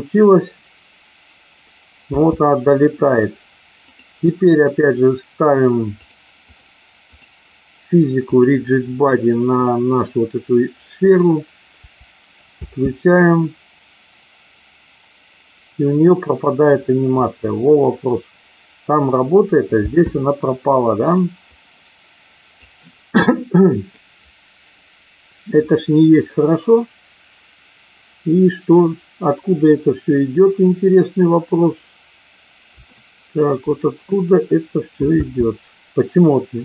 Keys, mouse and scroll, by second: 2.2 space, 3.8 click, 6.3 click, 7.1 click, 8.3 click, 12.6 space, 19.8 space, 21.0 click, 21.6-22.7 drag, 32.9 shift+middle click, 35.2 space.